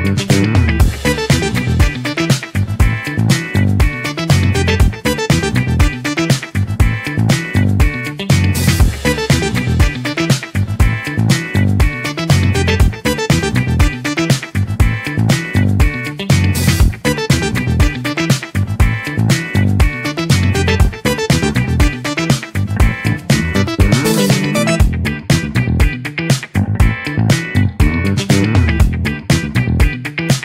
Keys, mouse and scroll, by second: 0.8 s, 5.0 click, 7.0 s, 10.7 b, 12.4 middle click, 13.0-13.5 scroll down 1, 13.5 middle click, 14.4 shift+click, 15.0-16.1 middle drag, 16.5-18.4 middle drag, 18.4 Tab, 18.6-19.4 scroll up 3, 19.4 click, 20.1 click, 27.2 click, 27.8-29.8 middle drag, 29.8-30.2 scroll up 3, 30.2-30.4 middle drag.